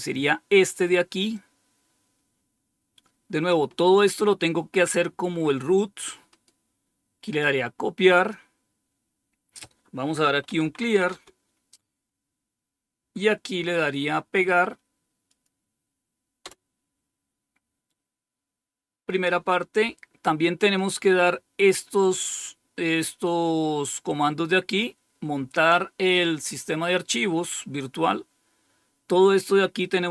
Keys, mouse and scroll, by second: 1.3-3.5 drag, 7.2 click, 8.1 click, 10.1-11.4 typing, 15.2 click, 16.4 Return, 20.7-21.2 scroll down 1.